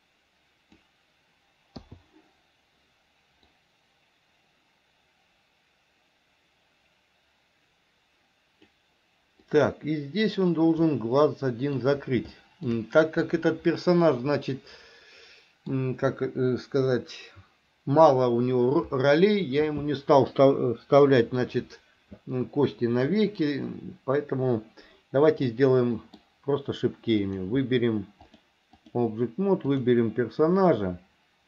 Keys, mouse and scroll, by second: 3.7-9.0 drag, 9.7-10.7 drag, 11.1 middle click, 12.5 shift+middle click, 14.7-15.9 middle drag, 25.7 middle click, 28.6 click, 29.9 click.